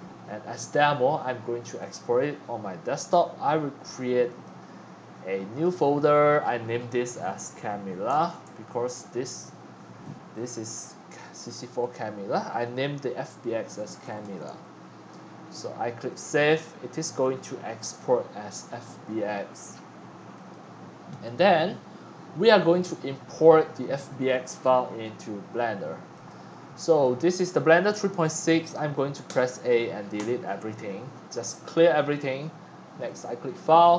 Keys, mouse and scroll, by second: 0.2 click, 0.4-1.9 drag, 4.2 click, 5.6 click, 6.9-8.4 typing, 10.3 click, 11.8 click, 13.4-14.7 typing, 15.9 click, 16.9 middle click, 20.3 click, 21.1 click, 24.6 click, 25.1 middle click, 26.1 click, 26.8 click, 27.0 click, 28.1 click, 29.2 a, 30.1 Delete, 33.0 click, 33.7 middle click, 33.8-33.9 middle drag.